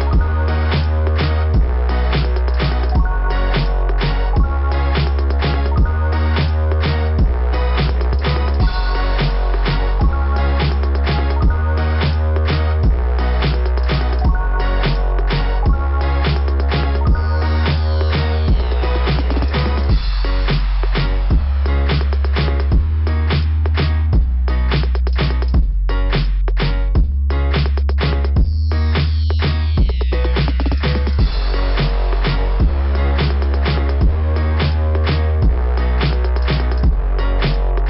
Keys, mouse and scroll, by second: 0.2 click, 0.4 click, 1.8 click, 4.3 click, 4.4 click, 5.9 click, 7.6 click, 7.7 click, 9.4 click, 9.7 click, 10.0 click, 10.1 click, 11.9 click, 12.0 click, 12.8 scroll up 2, 15.1 click, 15.2 click, 17.8 click, 17.9 click, 20.0 click, 20.1 click, 20.1 click, 20.2 click, 21.7 click, 21.7 click, 23.0 click, 23.1 click, 24.5 click, 24.5 click, 25.4 click, 25.8 click, 26.2 click, 26.4 click, 26.4 click, 26.6 click, 28.6 click, 28.7 click, 28.8 click, 28.9 click, 31.4 scroll down 4, 32.1 scroll down 1.